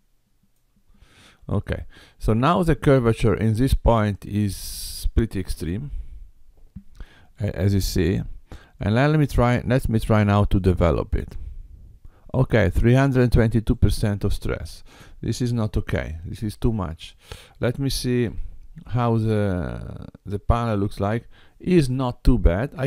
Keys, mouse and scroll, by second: 2.5 middle click, 6.0 Tab, 10.5 click, 13.7 click, 15.5 Tab, 18.3 g.